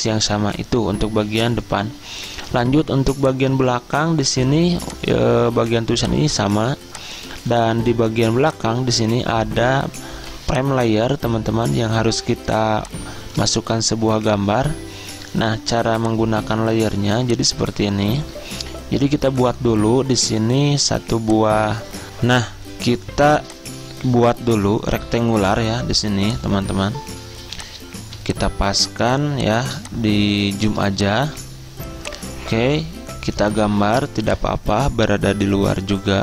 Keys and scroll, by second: 10.2 z, 22.1 alt+Tab.